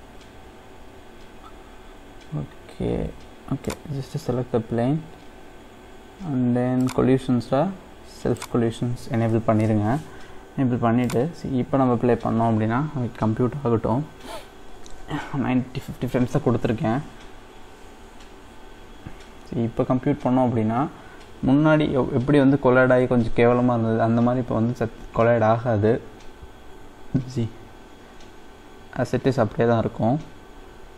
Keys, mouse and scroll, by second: 1.7-2.6 scroll up 4, 2.6-2.9 scroll down 2, 3.0-3.7 scroll up 1, 3.7 click, 4.5-6.8 scroll down 2, 6.8 click, 7.2-8.7 scroll down 2, 8.7 click, 11.0-14.9 drag.